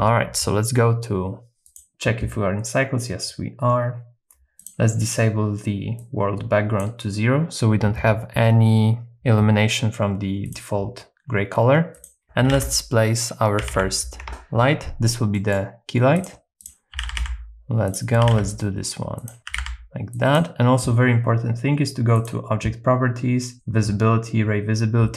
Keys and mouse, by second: 1.7 click, 6.0 click, 12.4 r, 12.6 x, 13.6 KP_9, 13.7 KP_0, 14.2 Return, 15.4 middle click, 16.1 click, 16.9 g, 17.2 z, 17.9 click, 18.2 g, 19.2 click, 19.5 r, 19.6 z, 20.2 click, 22.1 click, 23.5-25.1 drag.